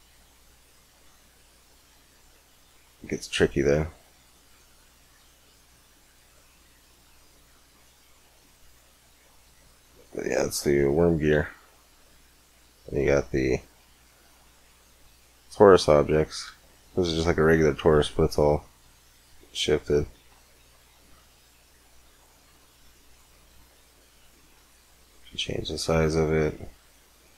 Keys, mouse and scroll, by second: 0.5-2.8 drag, 3.3-4.7 drag, 6.0-8.8 drag, 8.8 middle click, 10.4 x, 11.1 shift+a, 16.3 g, 18.7 x, 19.6 click, 20.0 shift+a, 24.0-27.3 drag.